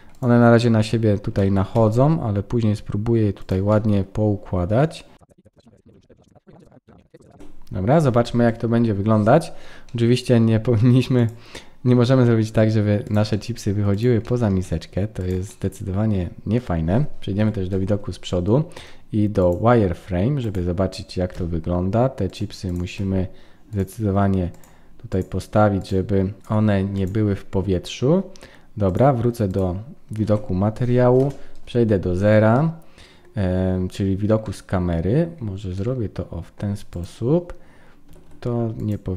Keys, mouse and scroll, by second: 0.1 shift+click, 1.4 shift+d, 3.7 middle click, 5.2-7.2 typing, 5.2 middle click, 5.4 middle click, 5.7 middle click, 5.8 click, 5.9 click, 6.0 click, 6.1 click, 6.2 middle click, 6.3 click, 6.4 click, 6.7 click, 6.8 click, 6.8 middle click, 7.0 middle click, 7.1 click, 7.2 middle click, 7.3 middle click, 7.4 ctrl+s, 7.4 click, 7.5-8.7 scroll down 3, 9.9 middle click, 11.1 click, 12.6 g, 13.3 middle click, 13.9 click, 14.2 middle click, 14.6 g, 15.5 middle click, 17.4 KP_1, 19.4 click, 20.0-20.5 scroll up 3, 20.4 click, 21.3 g, 22.7 click, 23.0 g, 24.5 click, 25.8 click, 26.4 g, 26.9 click, 27.4-28.4 scroll down 3, 28.9 click, 30.2 ctrl+s, 31.2 KP_0, 32.5 middle click, 33.7-34.4 scroll up 3, 34.4 middle click, 35.4-35.9 scroll up 2, 35.7 middle click, 36.9 click, 38.1 r.